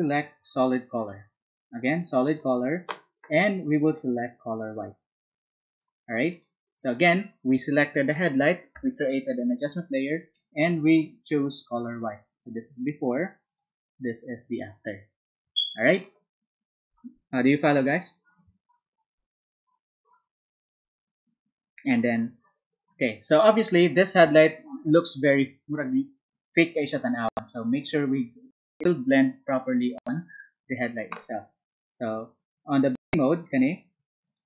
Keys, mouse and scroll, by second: 2.2 ctrl+click, 4.0-6.0 ctrl+drag, 12.3 ctrl+click, 13.4 ctrl+click.